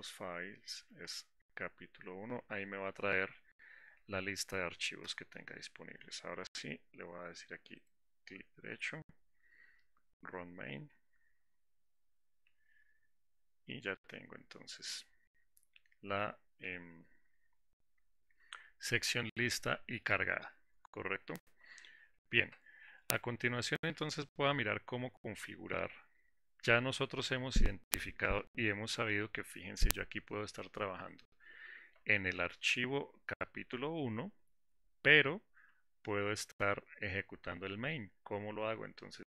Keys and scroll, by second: 5.4 Return, 10.5 ctrl+shift+F10.